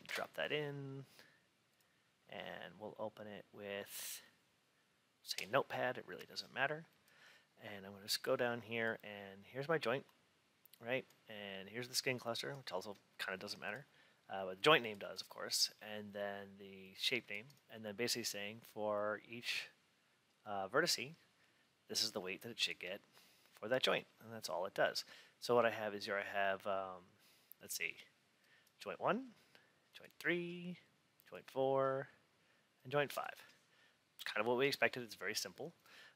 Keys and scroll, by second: 0.0 Return.